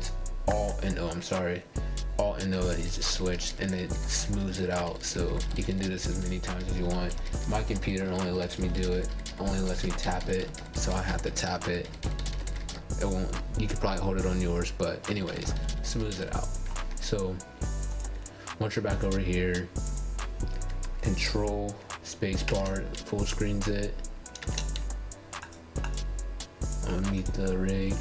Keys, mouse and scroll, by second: 1.4-3.0 alt+o, 3.3-6.5 alt+o, 6.6-15.9 alt+o, 18.3 click, 21.3 ctrl+space, 22.5-24.2 scroll down 5, 25.3 click, 25.8 ctrl+space, 26.9 click, 27.6 ctrl+space.